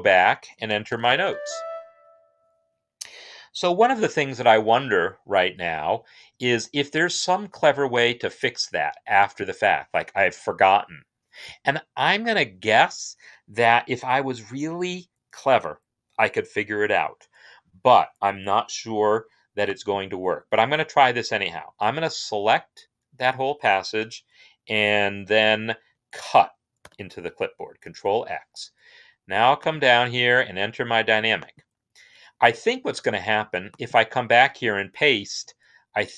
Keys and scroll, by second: 0.3-1.4 typing, 5.3 typing, 26.7 ctrl+x.